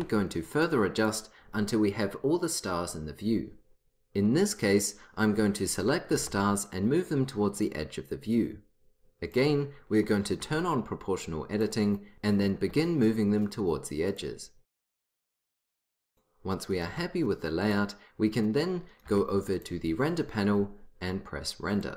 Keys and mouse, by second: 2.9 click, 3.8 click, 5.8-7.8 drag, 6.2 g, 9.4-10.5 drag, 10.5 g, 12.1 g, 12.6 g, 15.2-16.8 drag, 15.4 g, 17.0 g, 19.2 g.